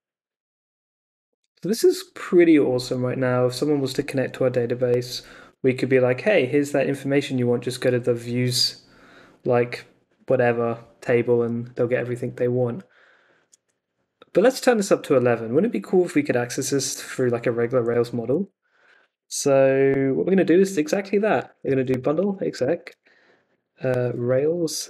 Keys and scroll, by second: 18.3 super+Tab, 21.0-24.8 typing.